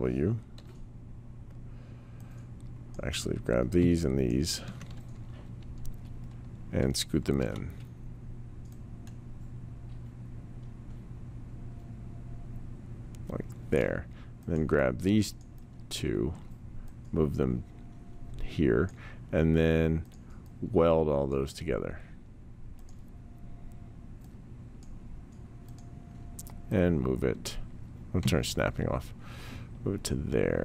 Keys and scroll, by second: 0.5 w, 7.3 r, 16.3 w, 28.2 s.